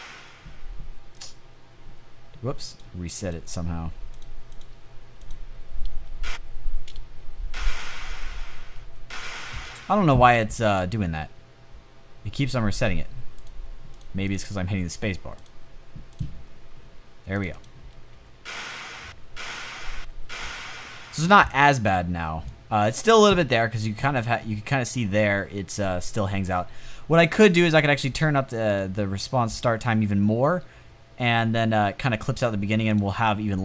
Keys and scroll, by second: 5.4 space, 6.2 space, 7.8 space, 9.0 space, 17.6-20.4 typing, 33.5 space.